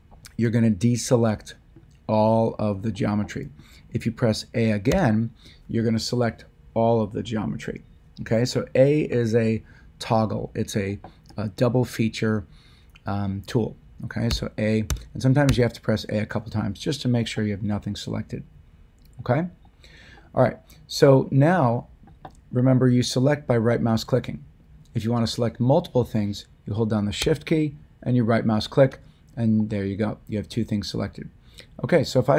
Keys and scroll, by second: 4.8 a, 14.2 a.